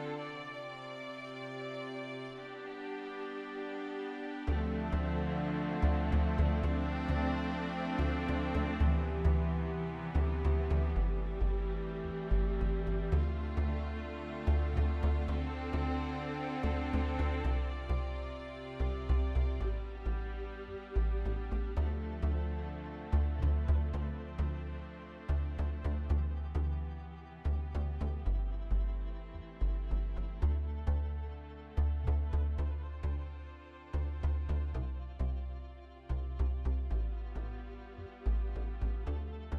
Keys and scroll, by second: 1.2-1.9 typing, 2.1 Return, 18.8 ctrl+alt+c, 21.8-22.7 typing, 26.7 Up, 26.7 typing, 29.3 ctrl+a, 30.8-31.7 typing, 33.7 ctrl+a, 33.9-34.4 typing, 36.8 Down, 37.0 Down, 37.2 Down, 37.2 typing, 37.3 Down, 37.5 Down.